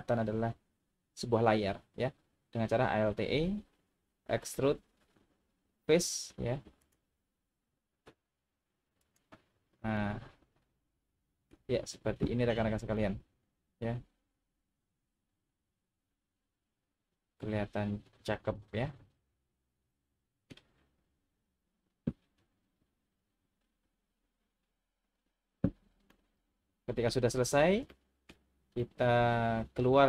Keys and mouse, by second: 3.3 alt+e, 9.0 click, 10.0-11.5 middle drag, 13.0-19.1 middle drag, 19.1 click, 20.0 middle click, 26.2 middle click, 27.9 shift+middle click, 28.8-30.0 middle drag.